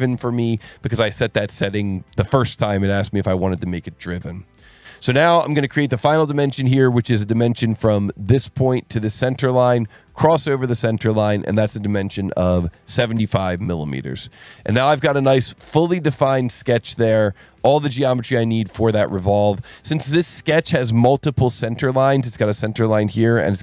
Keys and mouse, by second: 7.9 click, 9.0 click, 11.8 click, 12.7 KP_7, 13.0 KP_5, 13.2 KP_Enter, 15.1 click, 15.6 Escape, 20.0 Escape, 22.4 click.